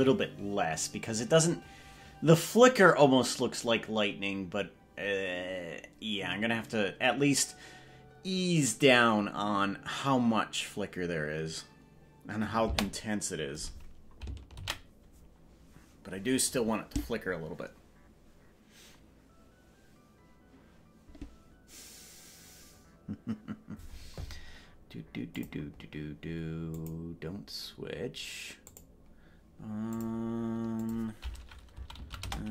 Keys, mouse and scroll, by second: 12.8 space, 18.0 ctrl+s.